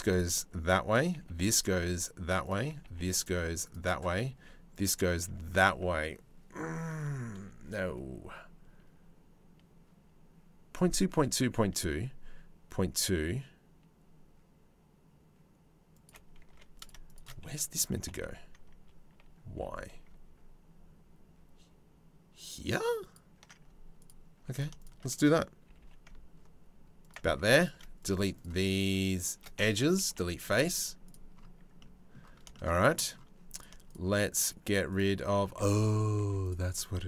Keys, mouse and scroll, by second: 0.5 click, 0.7 g, 2.3 g, 3.3 click, 3.7 g, 15.6 click, 16.1 2, 16.4 click, 16.7 shift+click, 17.6 g, 24.1 middle click, 25.3 g, 27.0 3, 27.2 click, 28.0 shift+click, 28.4 click, 28.7 click, 29.7 Delete, 32.1 shift+click, 32.3 middle click, 32.7 middle click, 33.5 shift+click, 35.4 1, 35.8 2, 36.0 click.